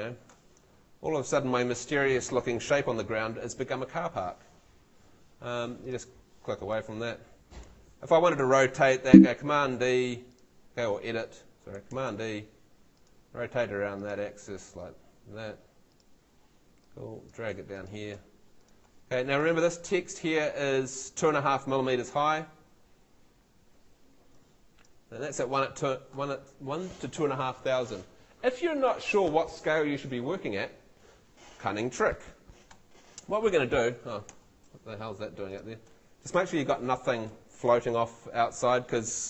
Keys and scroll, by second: 9.1 super+e, 11.9 super+e, 22.9 Escape, 34.3 Escape, 36.3 BackSpace.